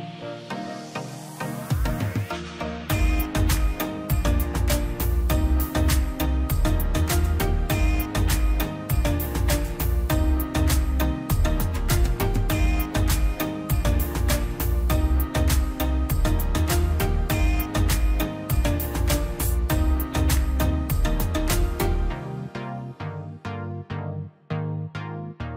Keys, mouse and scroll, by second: 1.6-3.7 middle drag, 3.7 click, 3.9 scroll up 1, 4.2 middle click, 4.9 scroll up 1, 5.2 click, 6.1 l, 6.3-6.8 scroll up 1, 6.8 click, 7.8 scroll down 1, 8.4 middle click, 8.7 space, 8.8-9.3 scroll up 1, 9.3 p, 9.7 click, 10.5-10.9 scroll down 2, 10.8 middle click, 10.9 middle click, 11.3 scroll up 1, 11.5 click, 12.2 middle click, 12.5 scroll up 1, 13.2 l, 13.3-13.7 scroll up 1, 13.7 click, 13.7 click, 14.4 scroll down 1, 14.4 space, 15.1 p, 15.3 click, 16.1 scroll down 1, 16.4 middle click, 16.7 scroll up 1, 17.0 middle click, 17.8 scroll down 1, 18.2 middle click, 18.9 scroll up 1, 19.7 l, 19.9-20.4 scroll up 1, 22.6 click, 24.0 space, 24.4 click.